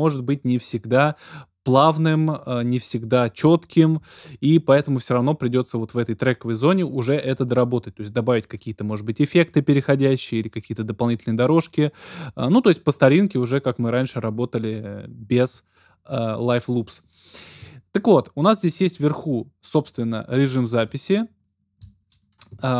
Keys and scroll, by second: 22.4 Return.